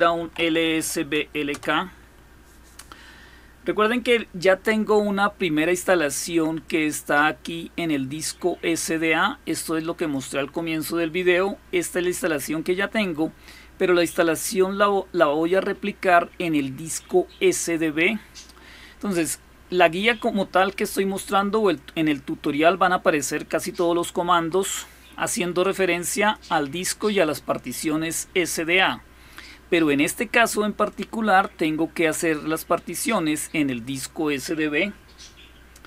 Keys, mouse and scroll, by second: 0.0-1.1 typing, 1.3 Return, 6.4-10.0 drag, 14.2-17.4 drag, 21.4 click, 22.3-26.2 drag, 30.7-33.8 drag.